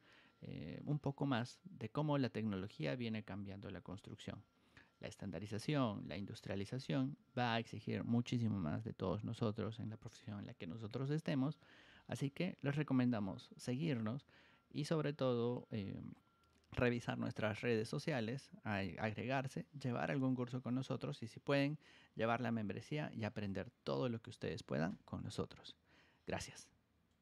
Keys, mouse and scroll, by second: 27.0 click.